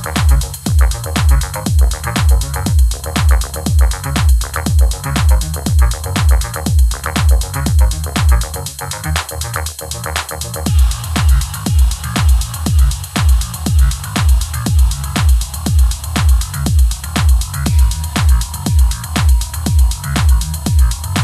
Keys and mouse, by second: 0.0-0.9 typing, 0.0 ctrl+z, 0.5 Tab, 2.2 ctrl+s, 2.3 click, 2.7 z, 2.8 click, 3.6 ctrl+s, 3.8 g, 3.8 y, 5.2 ctrl+s, 5.3 z, 5.5 z, 5.9 middle click, 6.2 ctrl+s, 7.0 middle click, 7.2 t, 8.0 click, 8.3 ctrl+s, 8.6 click, 9.9 click, 10.4 click, 10.8 click, 11.1 ctrl+s, 11.9 click, 13.1 ctrl+s, 14.1 t, 16.2 ctrl+s, 16.5 ctrl+s, 16.9 Tab, 17.2 Tab, 17.4 click, 17.7 s, 18.5 click, 18.8 click, 19.1 ctrl+s, 20.8 g, 20.8 z.